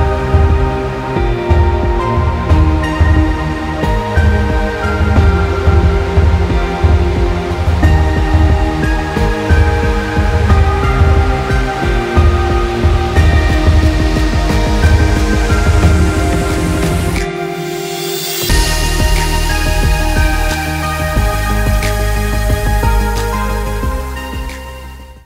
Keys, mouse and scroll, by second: 5.3 click, 6.9 alt+Num_Lock, 7.1 alt+scroll up 1, 7.2 alt+scroll down 1, 7.7 space, 7.9 click, 8.0 space, 9.2 click, 13.5 click.